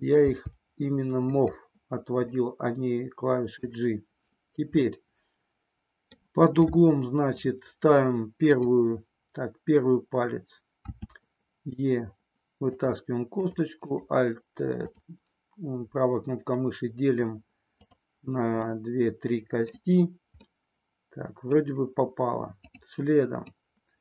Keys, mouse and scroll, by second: 0.2 g, 2.4-3.7 middle drag, 3.7-4.8 scroll down 1, 4.8 scroll down 1, 4.9-6.2 middle drag, 10.9 e, 12.8 click, 13.3 click, 17.9 click, 18.6-19.7 middle drag, 20.4-21.7 middle drag, 22.7 click, 23.6-24.0 middle drag.